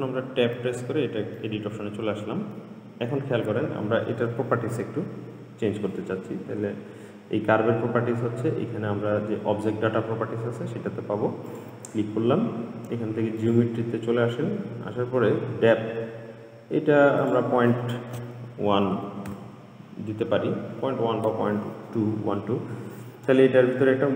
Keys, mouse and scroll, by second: 0.7 Tab, 1.6-4.7 middle drag, 11.7 click, 12.8-13.7 scroll down 2, 13.7 click, 14.1-14.6 scroll down 2, 14.8-17.4 scroll down 4, 17.4-20.6 drag, 22.1-23.0 scroll up 4, 23.0-24.1 scroll down 4.